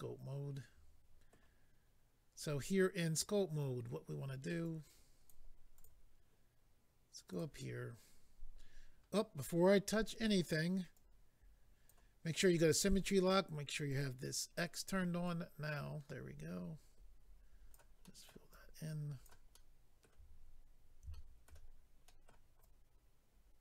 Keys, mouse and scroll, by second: 4.6 click, 5.7 click, 5.8 click, 7.4 click, 10.9 click, 13.9 click, 14.0 click, 15.2 click, 15.3 click, 18.0 middle click, 18.5 click, 19.5 middle click, 21.1 shift+middle click, 21.7-22.0 scroll up 2, 22.0 middle click, 22.6 click.